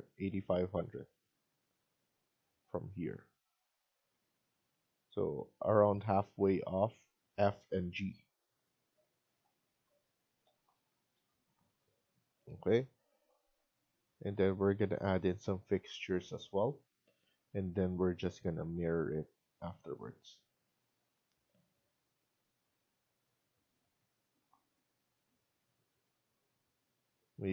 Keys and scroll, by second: 3.8 Escape.